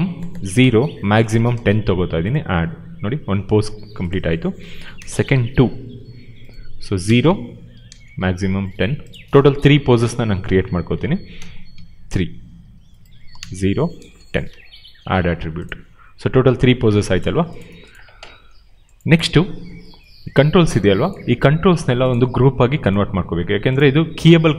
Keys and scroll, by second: 0.5 0, 4.5 ctrl+v, 4.9 BackSpace, 5.3 2, 7.0 0, 7.3 Tab, 10.8 ctrl+v, 11.5 BackSpace, 11.7 3, 13.0-14.4 typing.